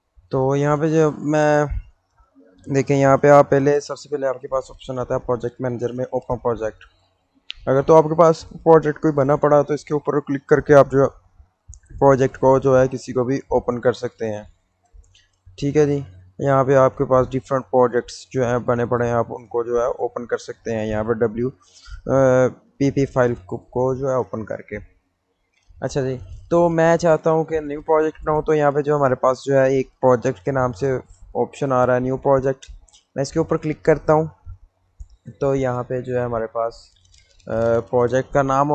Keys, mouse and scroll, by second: 9.0 click, 16.9-19.0 drag, 32.8 click, 35.4 click.